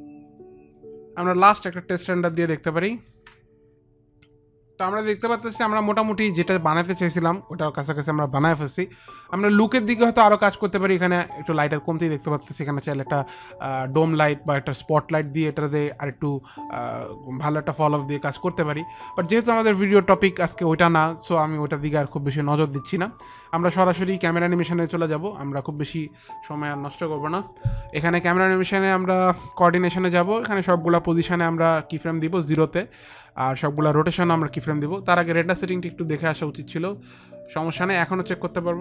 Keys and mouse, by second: 1.4 F9, 3.8 ctrl+r, 27.0 click, 29.8 click, 31.1 click, 34.6 click, 36.1 click, 38.7 click.